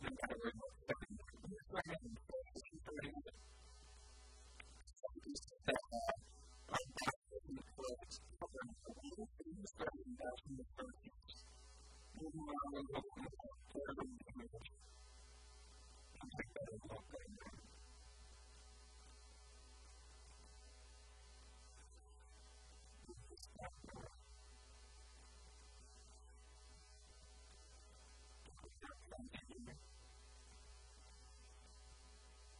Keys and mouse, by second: 0.0-3.4 right drag, 0.8 f, 1.0 a, 1.6 f, 1.8 a, 2.6 Tab, 4.0 Tab, 5.1-10.7 drag, 8.6-10.5 right drag, 10.0-11.5 middle drag, 11.0 right click, 11.5 click, 13.2-14.4 drag, 15.2 click, 18.3 click, 18.3 right click, 18.5 click, 18.5 right click, 18.6-20.1 drag, 18.6-20.1 right drag, 24.6 a, 24.8 b, 26.4 a, 26.8 KP_1, 27.1 KP_3, 27.6 b, 28.4-30.0 drag, 29.2-32.5 typing, 30.6 click.